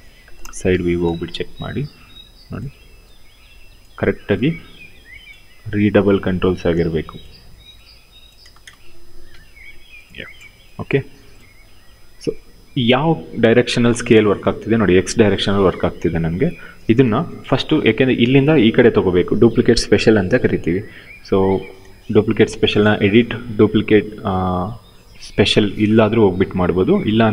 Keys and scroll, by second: 0.0-2.3 typing, 5.0 w, 7.0 r, 8.1 space, 9.0 f, 13.8 ctrl+z, 16.7 w.